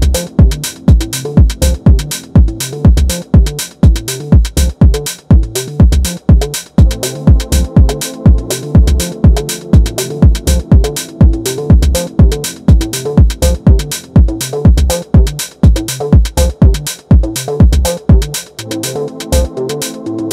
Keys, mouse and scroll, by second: 1.5 click, 4.1 middle click, 4.8 KP_1, 5.4-8.0 middle drag, 8.0 scroll up 1, 8.2 shift+middle click, 8.8 scroll up 1, 8.8 middle click, 9.7 t, 10.3 t, 10.7 r, 12.4 ctrl+z, 14.2 KP_7, 14.8 shift+middle click, 15.8 click, 17.1 click, 18.7 alt+click, 19.6 click.